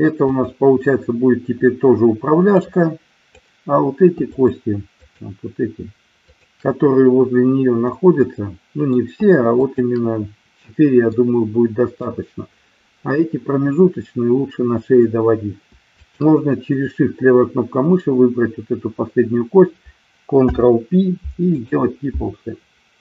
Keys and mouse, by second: 0.4 click, 2.6 click, 4.3 shift+click, 5.0-6.0 shift+drag, 6.3-7.4 shift+drag, 7.9-9.0 middle drag, 9.6 shift+click, 11.1-12.1 middle drag, 16.0 shift+click, 20.4 ctrl+p.